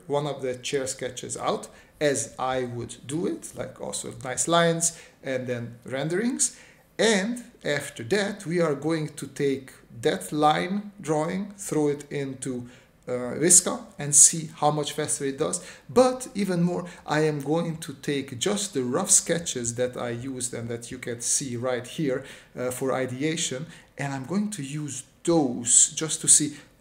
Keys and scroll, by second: 1.2 typing, 2.6-3.8 typing, 4.8 space, 6.2 space, 6.9 space, 7.8 space, 9.9 space, 10.9 space, 11.6 space, 12.8-15.2 typing.